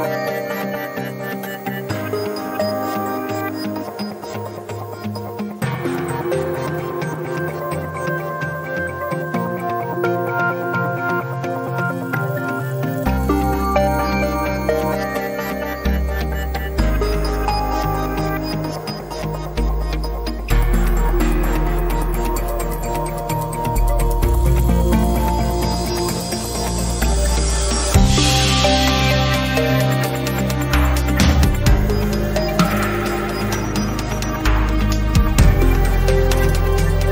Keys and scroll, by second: 0.3 x, 2.3 1, 13.4 g, 14.0 x, 25.9 Tab, 33.0 p, 34.1 Escape.